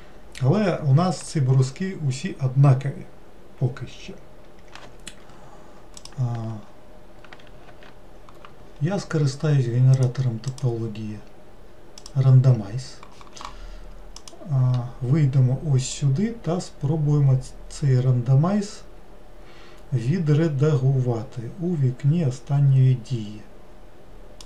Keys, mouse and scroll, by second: 6.0 click, 7.7 ctrl+z, 10.0-13.2 drag, 14.2-19.1 drag.